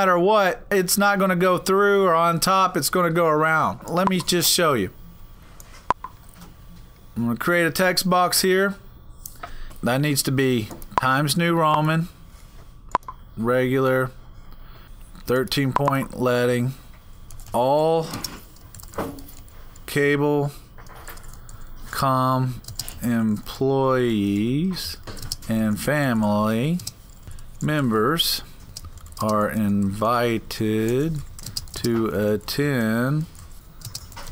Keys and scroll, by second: 17.0-34.3 typing.